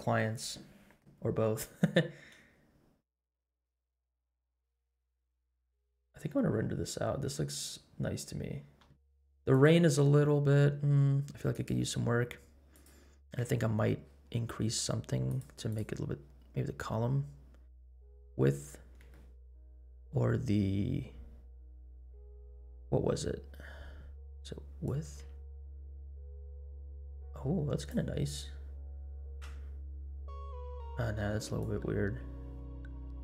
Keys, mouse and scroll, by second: 2.7-3.2 scroll up 4, 4.1 scroll up 1, 4.5-5.1 scroll down 3, 5.3 space, 6.1 scroll up 1, 6.9 scroll down 2, 8.8 space, 9.5 click, 10.2-10.5 scroll down 3, 11.5 click, 12.7 click, 13.9-15.2 scroll down 4, 15.2 click, 15.6 click, 18.6-19.0 scroll up 3, 19.1 shift+middle click, 24.8-28.0 drag, 28.2-28.7 scroll down 3, 29.0 scroll up 3, 29.5 space, 29.9 scroll down 1, 30.7 space, 31.5-33.2 drag.